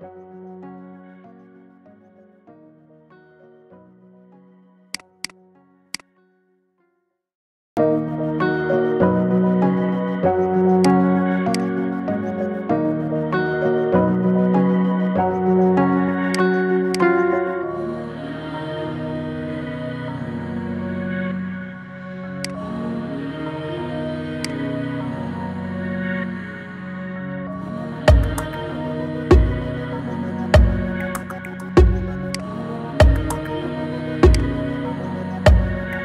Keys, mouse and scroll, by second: 0.5 g, 5.1 click, 5.7 click, 6.6 g, 11.4 click, 12.5 g, 16.8 click, 17.5 g, 22.6-23.3 scroll down 11, 23.3-23.9 middle drag, 23.9-24.2 scroll down 1, 24.2 click, 24.8-25.3 middle drag, 25.3-26.2 scroll up 11, 26.2-27.0 middle drag, 27.0-27.4 scroll up 2, 27.4-27.9 middle drag, 27.9-28.7 scroll down 3, 28.7 middle click, 29.1 scroll down 1, 29.5-32.2 middle drag, 32.2 right click, 33.3 KP_7, 34.1 click, 35.4 shift+a.